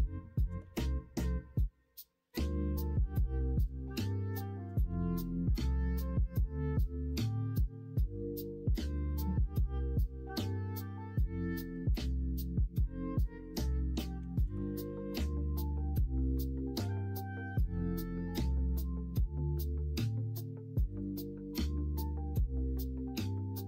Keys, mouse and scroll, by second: 2.8-5.0 drag, 7.2-15.1 drag, 15.8 middle click, 17.1 middle click, 19.8-23.6 drag.